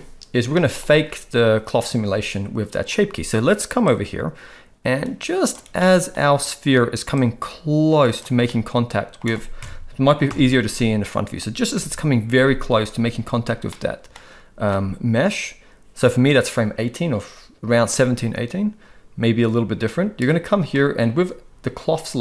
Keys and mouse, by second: 0.5-0.8 middle drag, 3.8-5.5 drag, 5.7-6.1 middle drag, 7.1 click, 8.5 middle click, 10.3 KP_1, 11.7 Right, 13.7 middle click.